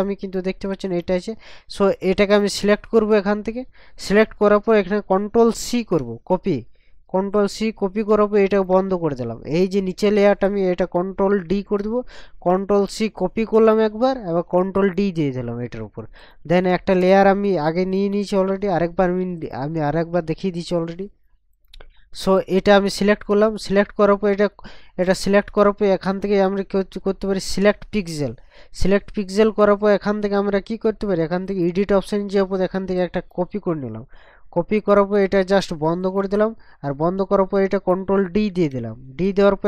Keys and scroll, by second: 5.6 ctrl+c, 11.4 ctrl+d, 38.5 ctrl+d.